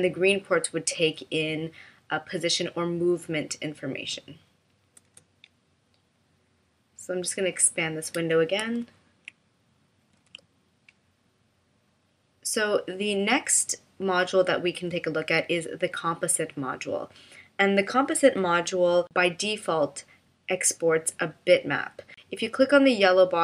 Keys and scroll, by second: 5.1 BackSpace, 8.8 super+f, 10.2 super+f.